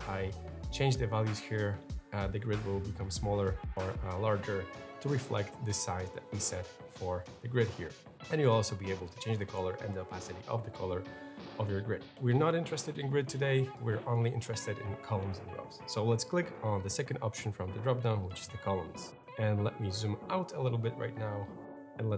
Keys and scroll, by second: 3.5 Up, 4.4 Up, 5.0 Up, 5.6 Up.